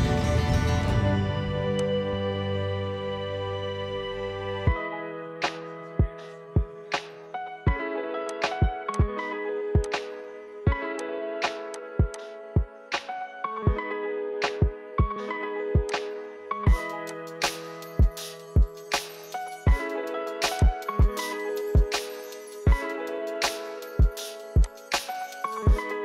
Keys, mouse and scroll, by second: 0.5 g, 12.2-13.4 drag, 13.4 g, 17.3 click, 17.5-18.7 middle drag, 18.7 s, 21.6 s, 25.1-26.0 middle drag.